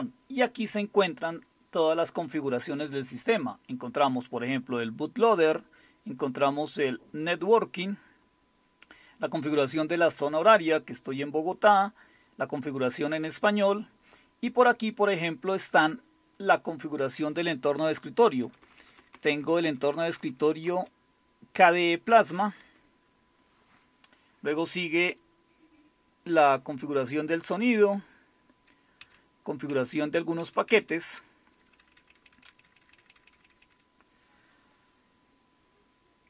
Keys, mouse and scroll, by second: 5.3-7.1 scroll down 2, 7.1-8.7 scroll down 1, 10.1-10.8 scroll down 2, 10.8 scroll down 1, 12.7-13.6 scroll down 2, 13.6-14.2 scroll down 1, 14.2 scroll down 1, 18.4 Up, 18.4 Up, 18.6 Up, 18.8 Up, 19.0 Up, 19.3 Up, 19.5 Up, 19.6 Up, 19.8 Up, 20.0 Up, 20.2 Up, 20.6 Down, 22.2 Down, 22.4 Down, 22.6 Down, 25.0 Page_Down, 27.3 Page_Down, 27.6 Page_Down, 29.0 Page_Down, 29.7 Page_Down, 30.7 Page_Down, 31.5 Page_Up, 31.7 Page_Up, 31.9 Page_Up, 32.1 Page_Up, 32.2 Page_Up, 32.6 Page_Up, 32.8 Page_Up, 33.1 Page_Up, 33.3 Page_Up, 33.4 Page_Up.